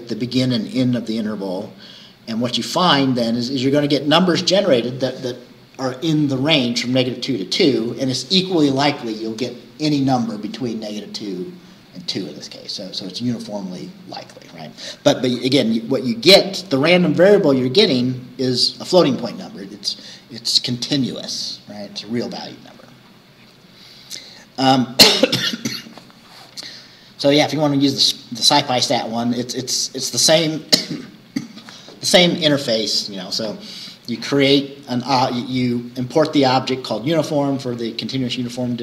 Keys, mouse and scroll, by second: 8.4-12.6 scroll up 1, 12.6-16.9 scroll up 1, 16.9-23.7 scroll up 1, 23.7-24.2 scroll down 2, 24.8-25.1 scroll down 2.